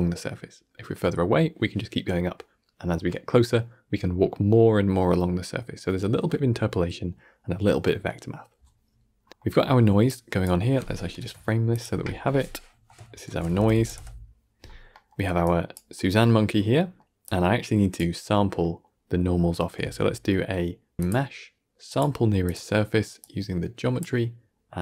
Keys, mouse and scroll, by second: 8.5 scroll up 5, 8.8-10.0 middle drag, 10.0 drag, 11.0 ctrl+j, 11.6 click, 12.0 KP_2, 12.6 F2, 14.8-15.3 middle drag, 15.3 click, 15.8 middle click, 16.3 scroll up 1, 16.6-17.1 middle drag, 17.1 click, 18.5 middle click, 19.0 scroll up 2, 19.3 middle click, 19.7 shift+a, 23.1 drag.